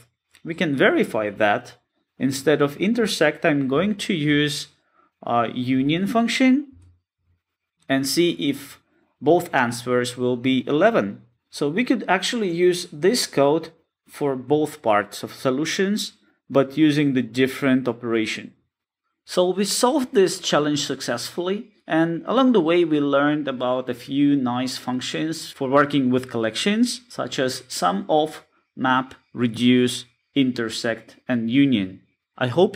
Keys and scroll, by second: 3.6 Return.